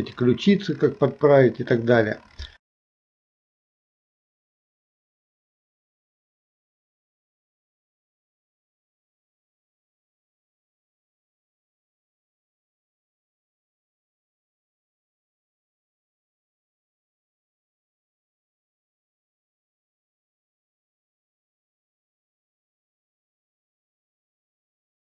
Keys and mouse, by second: 2.9 click, 3.8 g, 5.0 click, 6.0 e, 6.8 right click, 7.5 click, 7.6 KP_3, 9.2 g, 9.7 click, 9.9 e, 10.3 click, 10.4 right click, 11.2-14.3 typing, 11.7 shift+middle click, 12.2 click, 12.3 alt+p, 13.2 click, 13.6 click, 14.1 click, 15.1 ctrl+p, 15.6 shift+middle click, 15.8 click, 16.2 e, 16.8 click, 17.2 shift+middle click, 17.5 alt+p, 18.1 KP_1, 18.8 e, 19.4 middle click, 19.4 shift+KP_1, 19.8 click, 20.2 Delete, 20.6 click, 21.1-24.2 typing, 21.2 click, 21.7 alt+p, 22.1 click, 24.0 click.